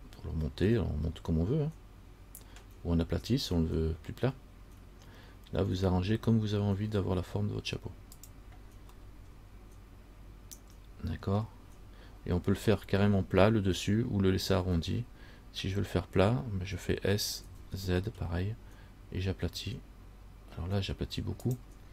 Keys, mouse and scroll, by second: 9.2 middle click, 9.2 scroll up 1, 11.6-12.3 scroll down 1, 17.6 s.